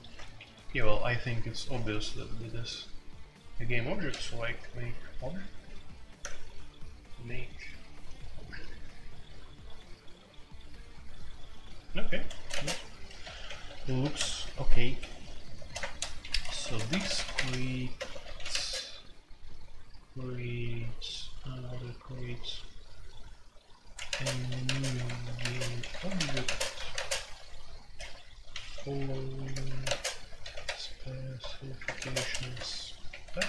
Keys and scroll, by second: 0.0-2.5 typing, 4.1 typing, 12.3-14.4 typing, 14.9 Escape, 15.6-18.5 typing, 15.8 Return, 16.5 Escape, 23.9-26.9 typing, 28.0-33.4 typing.